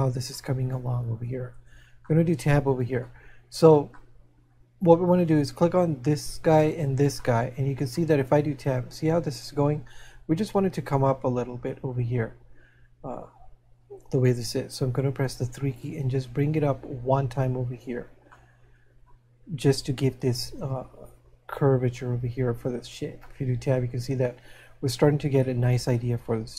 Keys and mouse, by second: 1.6 Tab, 2.2 middle click, 3.5 middle click, 7.5 shift+middle click, 16.5 click, 18.3 middle click, 23.7 middle click.